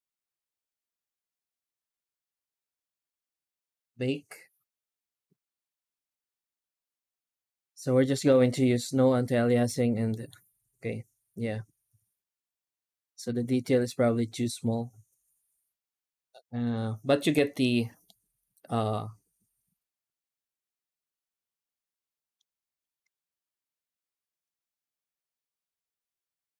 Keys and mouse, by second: 3.6 click, 9.9 middle click, 17.9-22.2 middle drag, 22.7 right click, 23.1 shift+right click, 26.2 Tab.